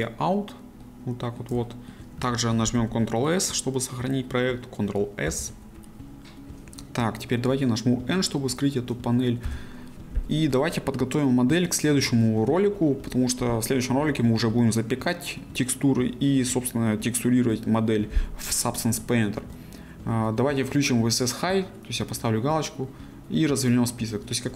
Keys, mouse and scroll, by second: 0.8-2.2 middle drag, 2.2 a, 22.2-24.5 drag.